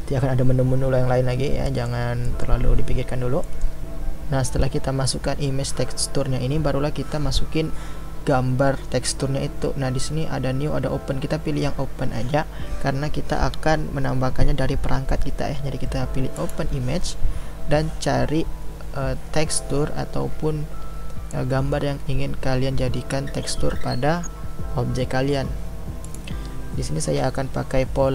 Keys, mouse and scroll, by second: 16.6-28.1 drag.